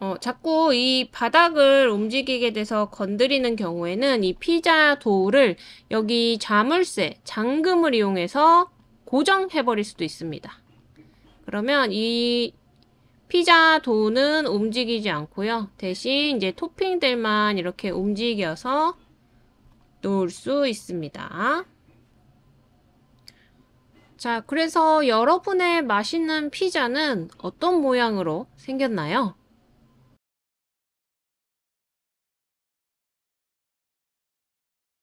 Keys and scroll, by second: 2.4 super+z.